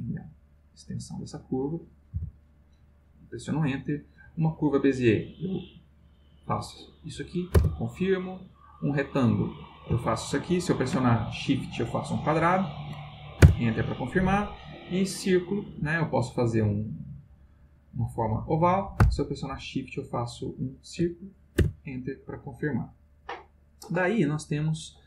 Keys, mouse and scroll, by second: 2.1 Return, 3.4 click, 4.4 click, 5.7 click, 6.6 click, 7.5 Return, 8.4 click, 9.2-12.7 drag, 13.4 Return, 14.4 click, 15.2-20.6 drag, 21.5 Return.